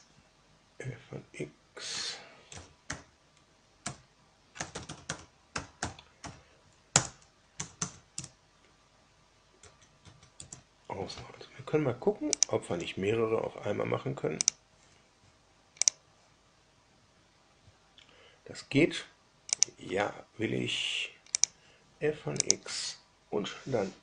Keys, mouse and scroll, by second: 2.2-6.7 typing, 6.8 Return, 7.5 Tab, 7.8 Tab, 8.1 Return, 9.5 Tab, 10.0 Tab, 10.3 Return, 12.2 click, 14.3 ctrl+click, 15.8 click, 19.5 click, 21.3 click, 22.3 click.